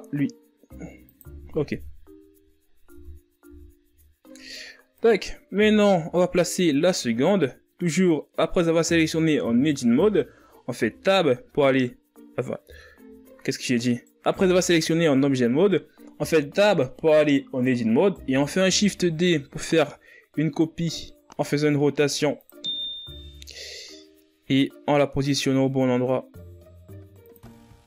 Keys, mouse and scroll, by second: 1.2 r, 4.6 KP_1, 5.5-6.4 scroll down 10, 5.8 Tab, 6.4 a, 7.3-7.9 scroll up 7, 7.9 right click, 8.9 z, 9.4-9.9 scroll up 4, 9.9-11.2 ctrl+scroll down 7, 13.7 Tab, 15.6 Tab, 19.1 Tab, 21.8 shift+d, 25.6 g.